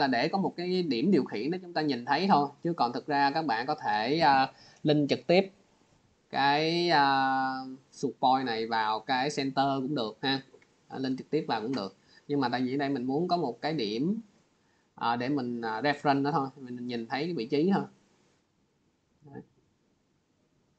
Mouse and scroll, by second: 3.7 click, 5.3 click, 6.3 scroll, 8.0 click, 8.5 scroll, 8.7 scroll down 5, 10.3 scroll, 10.9 click, 11.7 scroll, 13.0 click, 13.7 click, 15.8 scroll down 4, 16.1 click, 17.5 click, 18.5 click, 19.5 click, 20.6 click.